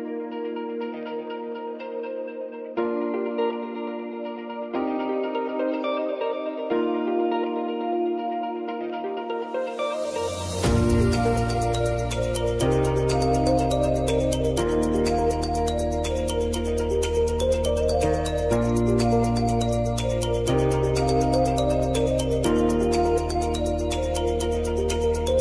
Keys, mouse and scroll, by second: 16.0 r, 17.7-22.1 drag, 23.5 Return, 24.1 click, 24.5 space.